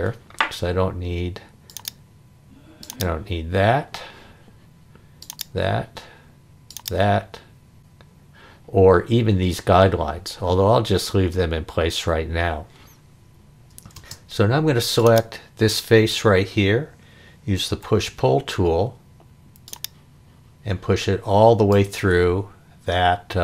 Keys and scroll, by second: 14.0 space, 17.7 p.